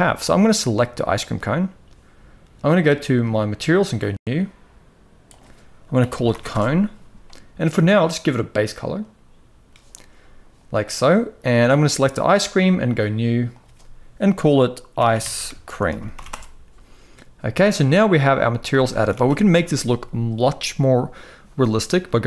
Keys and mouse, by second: 0.7 click, 2.5 click, 3.5-4.4 drag, 4.9-6.2 drag, 7.6 click, 11.4 click, 12.5 click, 13.2-15.9 drag, 18.1 z, 18.6 ctrl+s, 18.8 ctrl+s.